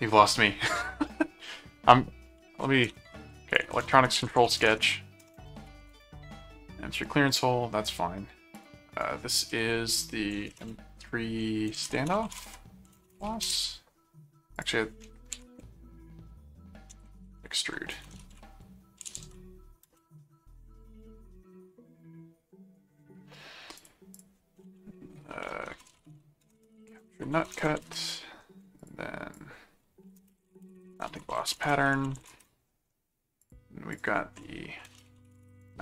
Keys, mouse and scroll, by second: 2.7-6.3 typing, 7.0 click, 8.6 click, 10.2-13.7 typing, 14.6 click, 17.9-19.7 typing, 19.9 Return, 23.8 click, 25.5-28.1 typing, 28.8 click, 30.0-32.7 typing, 33.4 click, 34.7-35.8 typing.